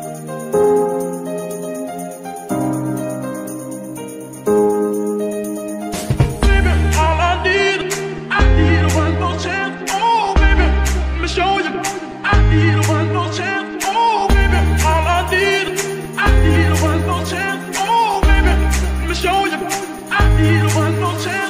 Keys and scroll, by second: 0.3 Tab, 10.3 z, 14.9 KP_7, 16.8 shift+s, 17.8 Tab.